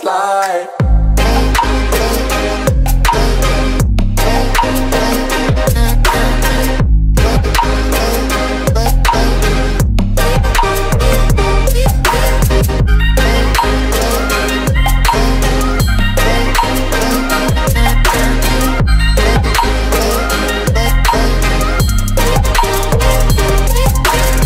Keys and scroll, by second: 3.3 r, 3.5 d, 4.0 space, 4.8 w, 13.5 Return, 19.0 p, 19.4 o, 20.4 p.